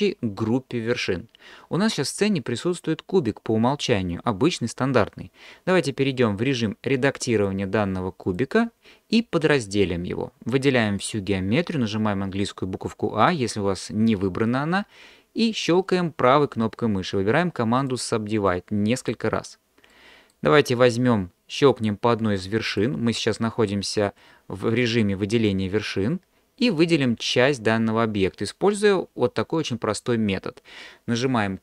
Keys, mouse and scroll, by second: 7.4-8.4 drag, 16.5-17.9 right drag, 18.5-19.1 right drag, 19.9 middle click.